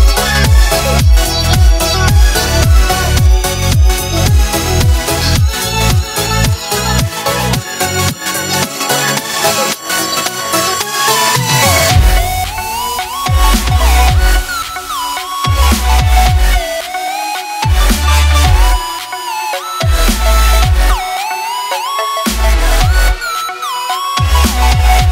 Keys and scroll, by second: 3.3 a, 3.6 Tab, 5.3-6.2 typing, 7.9 z, 10.3 a, 10.8 Tab, 11.0 a, 11.5 shift+g, 12.1 shift+g, 14.6-17.1 typing, 15.9 Tab, 20.0 c.